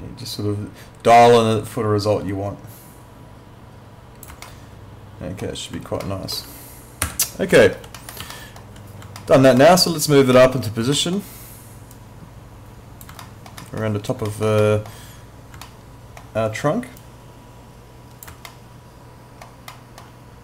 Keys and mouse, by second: 4.5 alt+middle click, 6.1 alt+middle click, 7.1 w, 7.6 alt+middle click, 8.3 alt+middle click, 9.2 alt+middle click, 10.9 alt+middle click, 11.9 click, 13.2 alt+middle click, 14.6 middle click, 15.7 alt+middle click, 17.0 click, 18.5 alt+middle click.